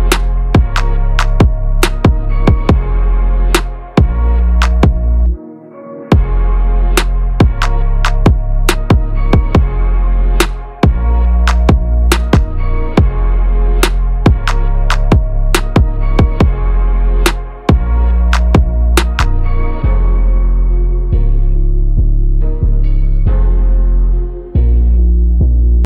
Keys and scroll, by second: 7.1 ctrl+a, 11.4 ctrl+v.